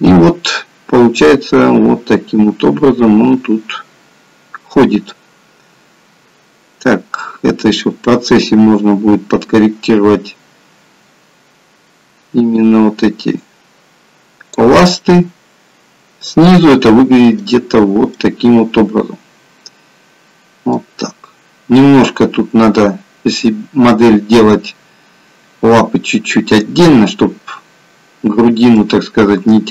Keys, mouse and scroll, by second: 14.9 middle click, 17.5-18.2 scroll up 1, 18.2-18.6 scroll up 2, 21.5-23.3 scroll down 1, 23.3 middle click, 28.7 middle click.